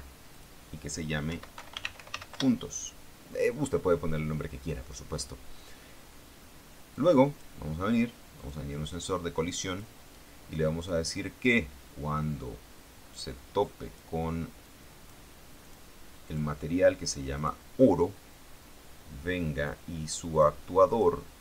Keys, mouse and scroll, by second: 0.5 click, 1.4-2.3 typing, 2.5 Return, 7.1 click, 8.5 click, 9.8 click, 11.0 click, 13.8 click, 14.8 click, 15.8 click, 16.5 click, 17.5 click, 19.8 click, 21.0 click.